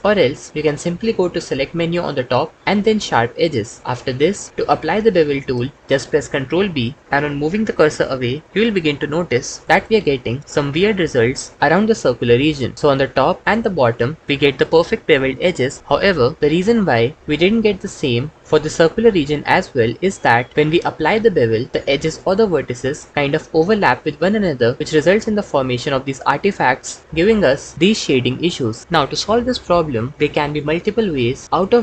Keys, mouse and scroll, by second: 2.7-4.0 drag, 5.8 ctrl+b, 18.4 ctrl+z, 20.6 ctrl+z, 20.8 ctrl+z, 21.7 ctrl+b, 25.2 Tab.